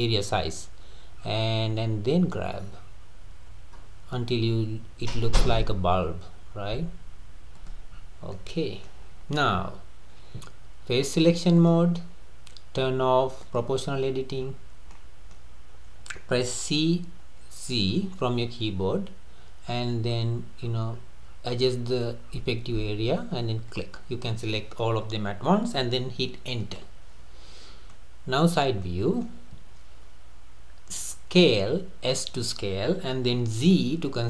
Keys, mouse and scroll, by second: 7.9-8.3 scroll up 3, 8.3-9.0 middle drag, 9.0-9.6 scroll down 3, 11.6 click, 13.5 click, 14.4 scroll up 3, 14.9-17.9 middle drag, 17.9 c, 27.9-28.6 middle drag, 28.6 scroll down 3, 28.8-31.0 middle drag, 31.0 s.